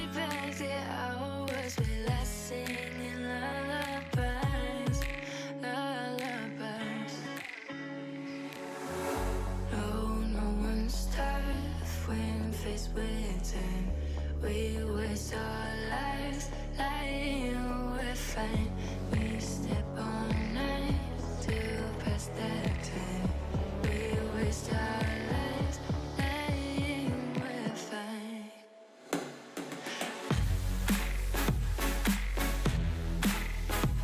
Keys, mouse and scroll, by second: 8.3 click, 9.0 click, 9.7-11.2 middle drag, 12.0 middle click, 12.3 scroll, 12.5-13.4 middle drag, 19.7 middle drag, 20.0 Tab, 25.3 shift+middle click, 25.5-25.8 scroll, 25.8-27.7 shift+middle drag.